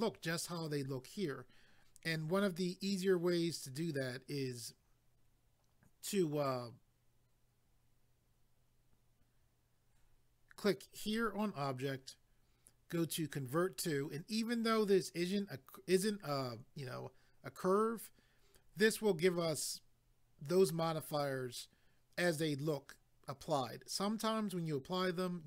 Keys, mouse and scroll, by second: 11.0 click.